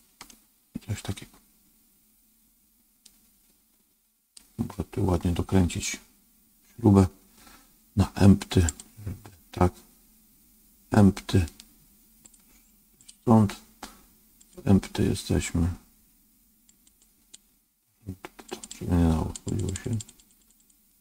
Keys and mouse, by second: 0.2-4.3 middle drag, 8.6 click, 12.1 click, 14.3 click, 16.6 click, 17.1 click, 18.5 click, 19.5 click, 19.8 click, 20.1 click, 20.5 click.